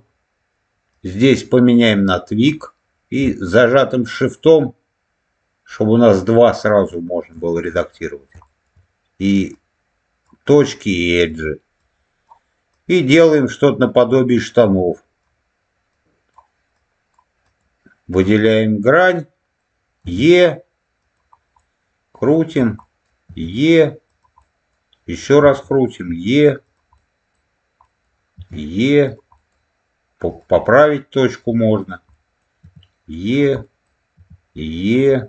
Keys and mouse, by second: 0.8-2.4 drag, 4.3 shift+click, 7.3 shift+middle click, 8.4 shift+middle click, 9.4 click, 10.7 click, 11.7 click, 12.6 click, 13.7 click, 14.7 click, 15.8 click, 16.6 click, 17.3 click, 19.9 e, 20.9 click, 21.5 middle click, 22.7 middle click, 23.2 e, 24.0 click, 24.3 middle click, 25.3 e, 26.5 click, 26.9 middle click, 27.8 middle click, 28.9 click, 29.2 middle click, 30.2 click, 30.8 click, 31.7 click, 32.0 middle click, 32.5 e, 33.2 click, 33.5 middle click, 34.0 e, 34.8 click.